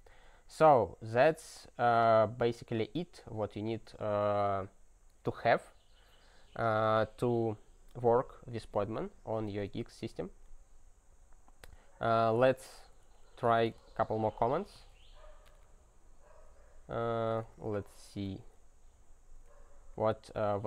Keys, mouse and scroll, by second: 0.3 alt+w, 10.1 click, 12.2-18.6 typing, 19.2 ctrl+p, 20.0 alt+b.